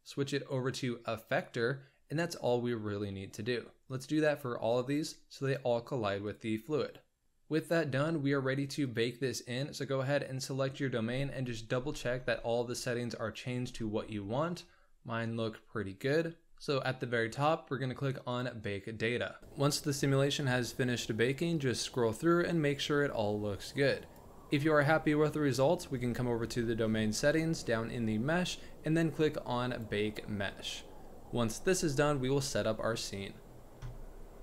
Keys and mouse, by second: 3.8 click, 4.9 click, 5.5-6.3 drag, 6.8 click, 8.8 click, 16.4 Return, 18.3 click, 20.6-25.0 drag, 29.7-34.4 drag.